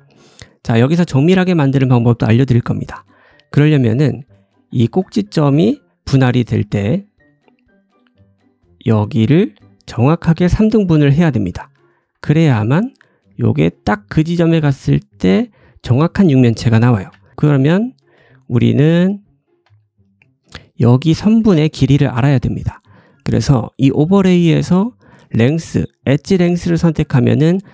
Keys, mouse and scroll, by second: 0.0 scroll down 1, 0.8 scroll down 1, 0.9-2.5 scroll up 1, 2.5-3.1 scroll up 1, 3.1-4.6 drag, 4.6 ctrl+b, 4.6 ctrl+z, 4.6-7.5 middle drag, 7.0 ctrl+z, 7.4 ctrl+z, 7.4 s, 7.4 d, 7.5-15.4 drag, 9.1-11.9 typing, 12.4 ctrl+shift+b, 15.4-18.2 middle drag, 16.9 ctrl+z, 17.8 d, 18.2 shift+click, 18.2 shift+right click, 18.7-27.7 shift+right drag, 19.0 click, 19.6 d, 20.3 d, 20.4 d, 21.2 2, 21.4 click, 23.6-27.3 drag, 23.6-27.3 middle drag.